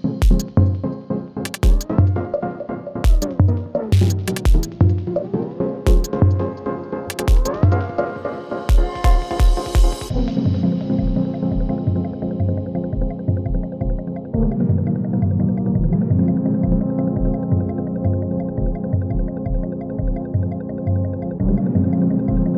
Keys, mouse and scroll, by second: 0.4 ctrl+alt+Home, 2.2 click, 5.7 click, 6.1 ctrl+d, 6.7 p, 7.6-11.1 drag, 11.6 u, 12.8 g, 14.3 click, 19.6-21.4 scroll down 1, 21.4 click.